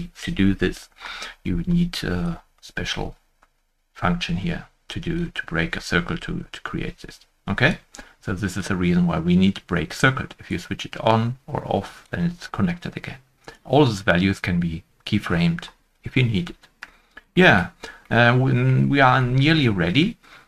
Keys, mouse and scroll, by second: 13.4 right click, 16.9 Tab, 16.9 shift+middle click, 17.0 right click, 17.6-17.9 scroll down 1, 18.2 middle click, 18.5 middle click, 18.5 shift+middle click, 18.8 scroll up 1.